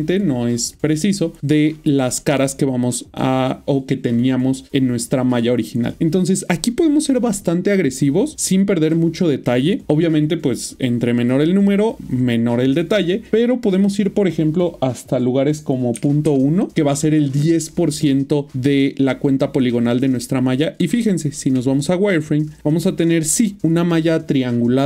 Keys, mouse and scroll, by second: 2.4 middle click, 6.7 middle click, 11.0 middle click, 13.3 click, 15.9 typing, 16.7 Return, 18.2 middle click, 20.7-21.2 typing, 22.0 middle click.